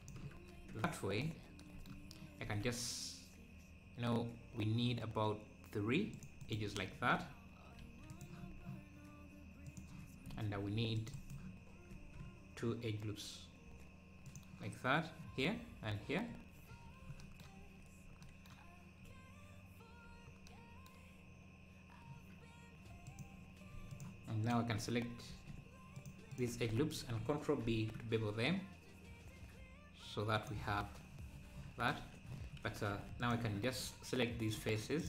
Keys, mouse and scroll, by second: 0.5 Tab, 0.8 `, 1.5 scroll down 1, 2.4 ctrl+r, 8.1-10.5 drag, 10.5 ctrl+r, 16.3 ctrl+b, 16.3 scroll up 2, 23.0-26.6 drag, 27.6 ctrl+b, 33.2-35.0 drag.